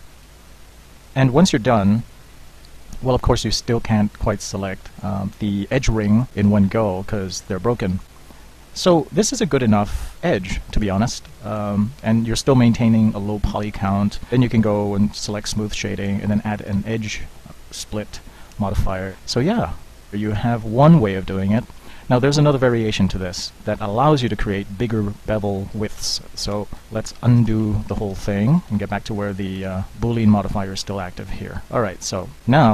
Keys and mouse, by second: 2.7-3.6 middle drag, 4.3-6.6 middle drag, 6.7 middle click, 7.4-8.6 middle drag, 8.6 middle click, 9.4 Tab, 10.8 Tab, 11.6 Tab, 18.6 middle drag, 26.6 Tab, 27.2 ctrl+z, 27.5 Tab, 27.8-28.2 ctrl+z, 28.6 ctrl+z, 28.8 ctrl+z, 28.9 ctrl+z, 29.1 ctrl+z, 29.2 ctrl+z, 29.6 ctrl+z, 30.0 ctrl+z.